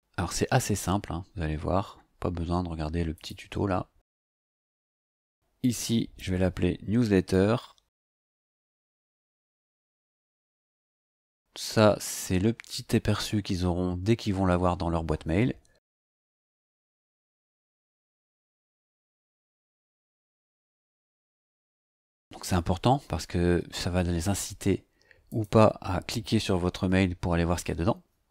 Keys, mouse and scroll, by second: 3.1 click, 5.6 click, 7.0-9.9 typing, 11.0 click, 15.7-22.4 typing, 25.3 click, 26.4 BackSpace, 26.8 t.